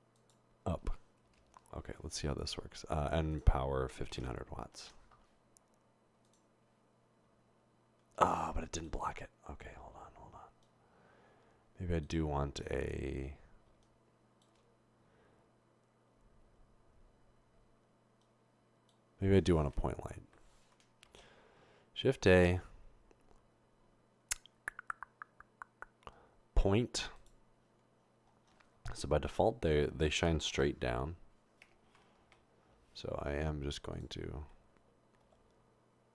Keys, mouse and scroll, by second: 1.3 typing, 3.3 click, 3.8-4.5 typing, 5.1 Return, 20.4 Delete, 29.2 typing, 30.5 typing, 32.2 typing, 35.2 typing.